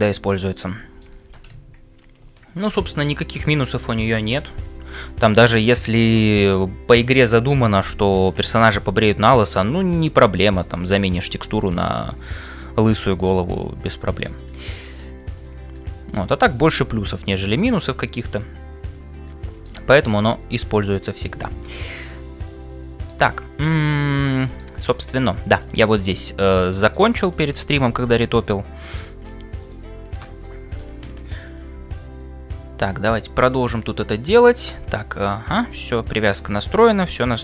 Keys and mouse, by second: 2.0 shift+1, 2.7 2, 3.9 shift+1, 14.5-15.6 middle drag, 15.9 middle click, 24.2 shift+middle click, 24.9 shift+middle click, 27.1-28.2 middle drag, 28.2 ctrl+s, 28.2-29.4 ctrl+drag, 31.8 f.